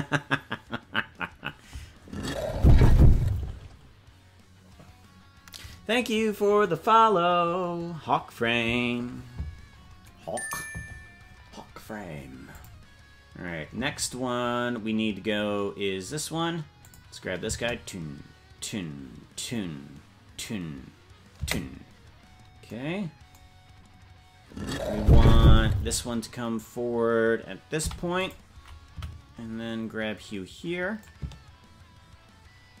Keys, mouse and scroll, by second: 12.5 click, 15.5-16.3 scroll down 1, 16.3-16.8 scroll down 4, 16.9 click, 17.5 space, 23.6 scroll down 1, 26.4-27.0 scroll down 1, 27.8 i, 29.0 Right, 31.1-32.8 drag.